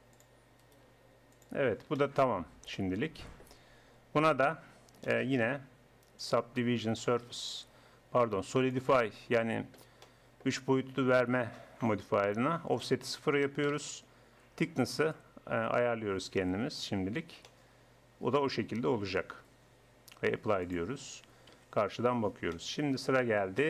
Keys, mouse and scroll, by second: 0.9 g, 2.3 Tab, 6.2-7.8 middle drag, 7.8 click, 10.1-12.8 middle drag, 12.8-14.6 drag, 15.1-16.9 drag, 17.3 middle click, 19.2 Tab, 19.6 Tab, 21.5 KP_1.